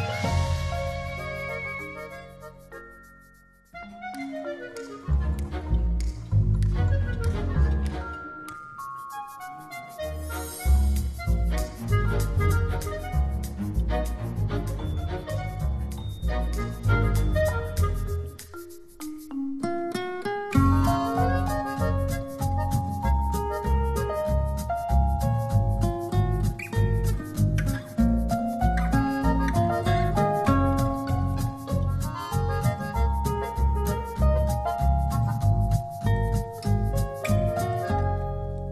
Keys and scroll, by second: 2.7 space, 10.1 shift+u.